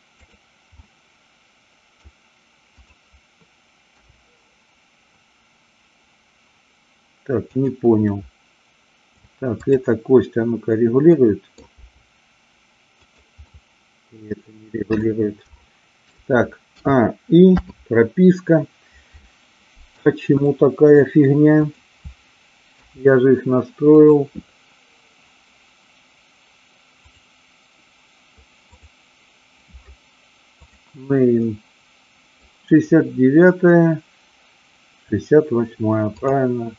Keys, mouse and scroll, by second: 0.2 click, 0.7-2.1 middle drag, 2.7-3.5 drag, 3.9 g, 7.5 click, 8.3-9.1 middle drag, 9.7-10.7 drag, 11.2-11.5 middle drag, 11.8 g, 13.1 click, 13.4-14.9 middle drag, 15.5 shift+middle click, 17.5 i, 19.7 middle click, 20.4-20.9 middle drag, 21.5 click, 22.8 g, 23.9 click, 27.1 click, 28.7 click, 30.5 click, 31.4-32.4 middle drag, 33.4-34.3 scroll up 1, 34.3-35.1 scroll up 1, 36.1-36.7 drag.